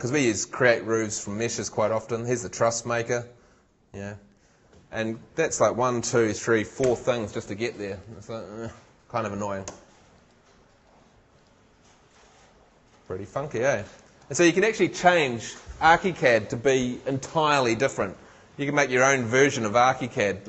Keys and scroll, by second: 9.7 shift+Escape.